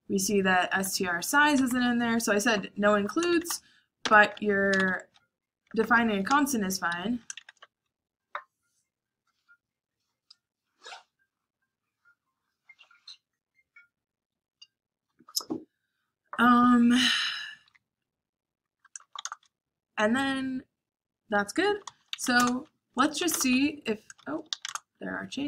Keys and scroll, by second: 0.0-3.0 typing, 4.1-7.6 typing, 6.6 Escape, 8.1 Escape, 16.7 Escape, 17.1-19.3 typing, 21.4-22.8 typing, 23.9 shift+;.